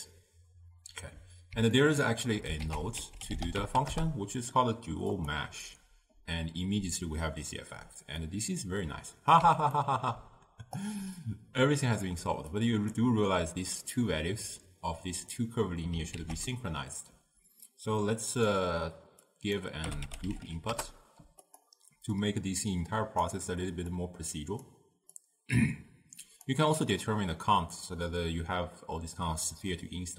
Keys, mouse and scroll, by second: 1.8 ctrl+middle click, 2.7 ctrl+a, 8.3-10.9 middle drag, 10.9 click, 12.6 click, 16.2 ctrl+a, 19.4-21.6 drag, 22.3-25.4 drag.